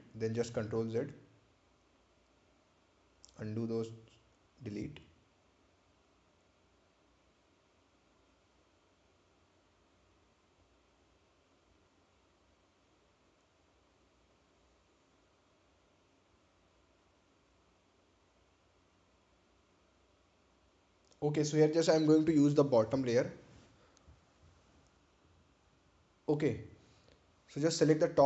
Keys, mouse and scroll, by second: 1.2 click, 1.9 Delete, 4.1 click, 6.3 ctrl+z, 8.0 click, 11.3 scroll down 1, 13.8 ctrl+click, 20.0-21.2 scroll up 1, 23.9 click, 28.0 click.